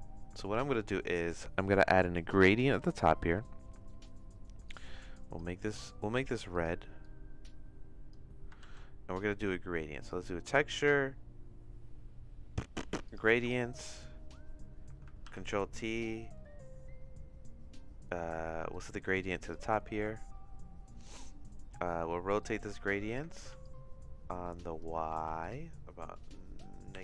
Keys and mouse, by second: 4.7 click, 6.2 click, 6.5 click, 8.6 shift+a, 15.2 ctrl+t, 18.8 click, 22.4 click, 23.3 ctrl+z, 23.6-24.8 drag, 25.2 ctrl+z, 25.5-27.0 drag.